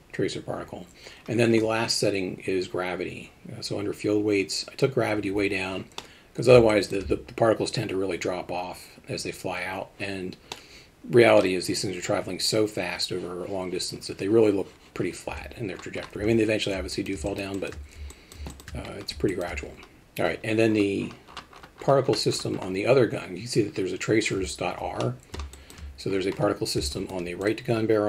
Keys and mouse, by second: 6.0-6.9 middle drag, 10.5-11.4 middle drag, 16.9 alt+middle drag, 17.3 shift+middle drag, 17.6 alt+shift+middle drag, 18.1 alt+middle drag, 18.5 alt+shift+middle click, 19.3 alt+shift+middle drag, 25.0-25.7 middle drag, 26.9 shift+middle drag.